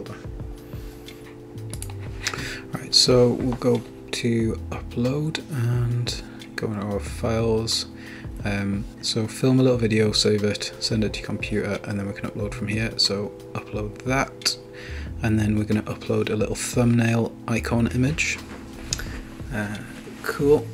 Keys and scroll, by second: 13.4 Return, 18.6 Return.